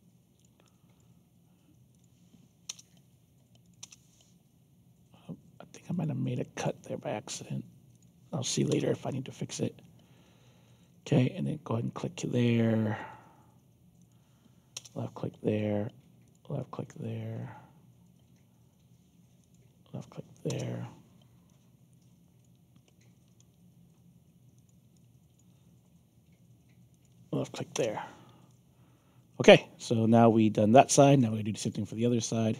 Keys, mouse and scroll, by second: 0.3 click, 0.6 alt+click, 1.9 click, 2.6 Return, 3.6 click, 3.8 Return, 5.9 click, 6.3 alt+click, 7.9 click, 8.6 Return, 9.5-10.8 alt+drag, 11.8 click, 12.4 alt+click, 13.9 click, 14.7 Return, 16.2 click, 16.5 alt+click, 19.4 click, 21.4 alt+click, 22.9 alt+middle click, 24.5 click, 24.9 alt+click, 26.9 click, 27.7 Return, 28.4-31.6 alt+drag, 32.0-32.5 alt+drag.